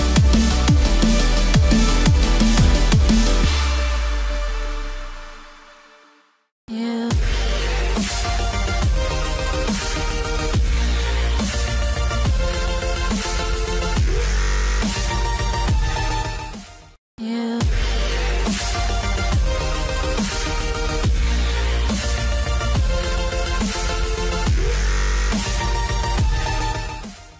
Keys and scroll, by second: 0.0 ctrl+0, 11.7 ctrl+0.